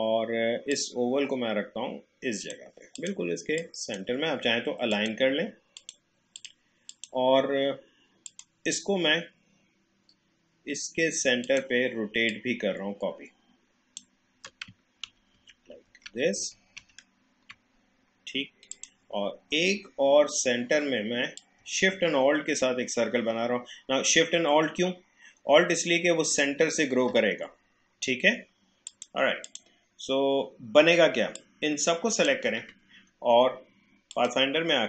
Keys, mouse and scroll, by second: 11.4 click, 12.3-15.0 alt+drag, 15.0 ctrl+d, 18.7 click, 21.4-34.1 drag.